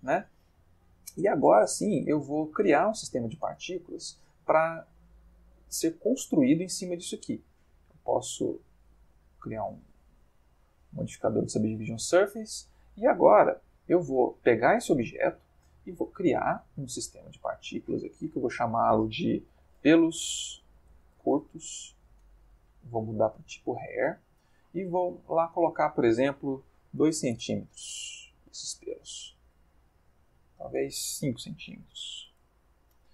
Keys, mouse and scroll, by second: 0.3-0.9 ctrl+middle drag, 1.3-3.6 ctrl+shift+middle drag, 3.6-4.5 ctrl+middle drag, 4.8-5.4 ctrl+shift+middle drag, 7.6 click, 8.4 click, 9.3 click, 10.1-12.7 middle drag, 13.7 click, 15.4-16.0 shift+middle drag, 16.9 click, 18.3 click, 19.5-21.5 typing, 21.7 shift+Return, 23.2 click, 24.3 ctrl+middle click, 25.6 click, 26.8 2, 27.0 c, 27.1 m, 27.3 Return, 28.5-29.7 ctrl+middle drag, 30.4 click, 31.6 5, 31.8 c, 32.0 m, 32.3 Return.